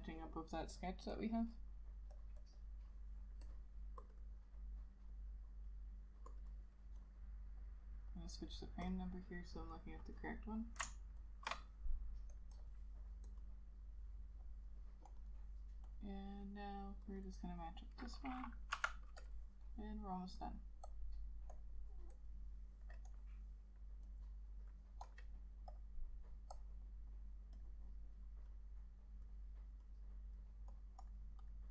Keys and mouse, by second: 2.5 double click, 9.8 double click, 11.3 ctrl+shift+click, 12.7 double click, 15.3 double click, 31.2 double click.